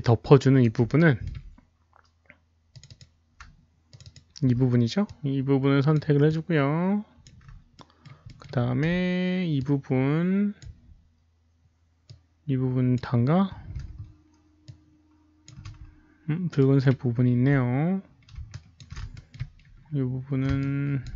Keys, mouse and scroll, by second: 1.0 alt+middle click, 2.7 click, 2.8 click, 3.8 shift+click, 4.0 shift+click, 5.0-5.9 shift+drag, 5.0 alt+middle click, 5.0 right click, 6.2-7.2 shift+drag, 7.7 alt+middle click, 7.7 shift+click, 7.7 right click, 8.2 alt+middle click, 9.5 alt+middle click, 9.5 right click, 9.5-10.5 shift+drag, 10.5 alt+middle click, 10.5 right click, 12.0-12.9 shift+drag, 12.0 alt+middle click, 13.8 shift+click, 13.8 alt+middle click, 14.6-15.4 ctrl+shift+drag, 14.6 alt+middle click, 14.7 alt+middle click, 16.5 alt+middle click, 18.3 alt+middle click, 18.4 ctrl+shift+drag, 19.1 alt+middle click, 20.5-21.0 ctrl+shift+drag.